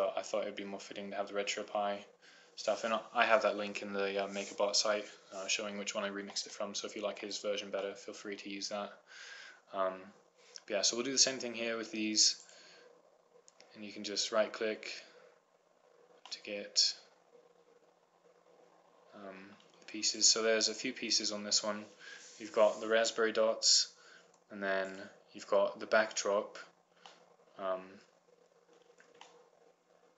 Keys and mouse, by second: 0.6-1.7 middle drag, 3.5-6.9 middle drag, 7.1 middle click, 8.5-10.0 middle drag, 13.1-14.7 right drag, 17.1-19.1 middle drag, 19.5 middle click, 21.4-22.5 right drag, 25.9-27.0 right drag, 27.9 middle click, 28.9-30.1 middle drag.